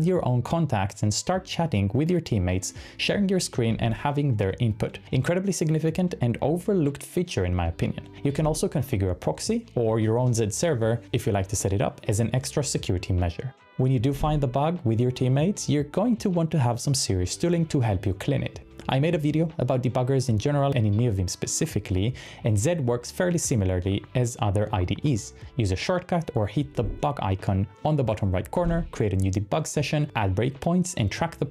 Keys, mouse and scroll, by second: 21.0 super+Tab, 24.3 shift+super+p, 24.4-25.8 typing, 26.4 Return, 28.3 click.